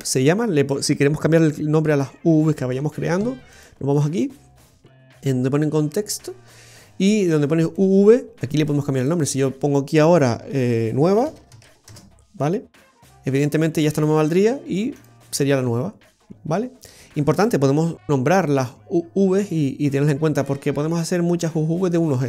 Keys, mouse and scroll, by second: 7.7 click, 7.7 scroll up 2.